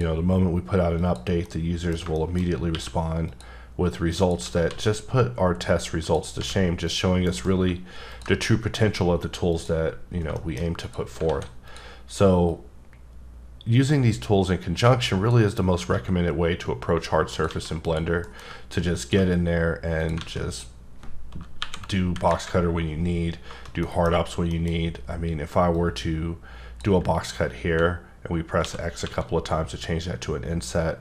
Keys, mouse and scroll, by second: 1.0 click, 1.4 middle click, 2.1 shift+middle click, 2.4 scroll up 2, 2.7 q, 3.2 click, 3.8-4.2 scroll down 1, 4.2 click, 4.4 s, 4.6 z, 6.0 click, 6.3 h, 6.9 click, 7.2 alt+m, 8.1 ctrl+click, 8.5-9.5 scroll up 3, 9.5 click, 9.9-10.2 scroll down 2, 10.3 shift+middle click, 10.8 click, 11.3 alt+a, 11.7 click, 12.4 click, 15.9 x, 17.3 click, 17.5 alt+a, 17.8 click, 18.2 alt+m, 19.0 ctrl+click, 19.4-20.0 scroll up 1, 20.0 click, 20.2 alt+a, 20.5 click, 21.6 KP_1, 22.3 KP_3, 23.8 middle click, 24.5 middle click, 24.7 scroll up 3, 25.7 click, 28.6 x, 29.1 x.